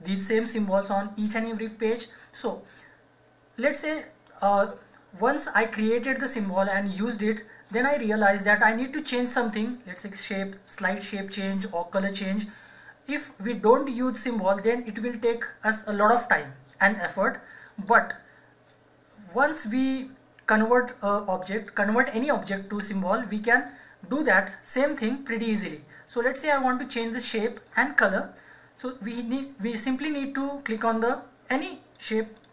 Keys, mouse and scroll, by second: 2.3 click, 14.5 click, 17.8 click, 27.0 click.